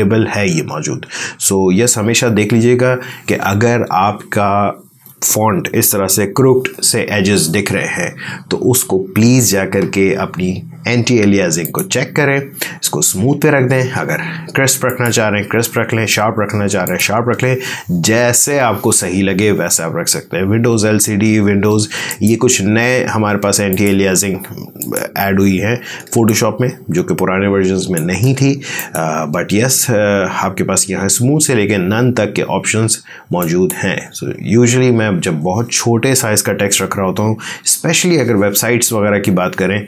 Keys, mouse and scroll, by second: 11.5 click, 14.7 click, 22.0 click, 25.8 space, 26.2-28.7 ctrl+drag, 33.3 click.